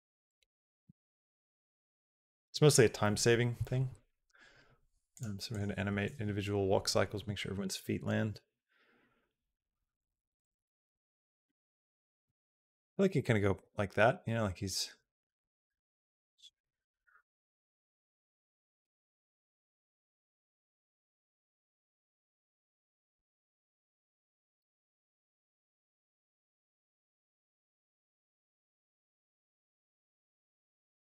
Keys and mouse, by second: 5.0 click, 5.4 click, 12.4 space, 14.5-20.0 drag, 21.2 click, 22.3 click, 22.8 g, 24.8 click, 25.0 space, 26.1 click, 26.5 space, 27.0 space, 27.8 space, 28.1 click, 29.3 click, 29.7 shift+d, 30.7 click, 30.9 g.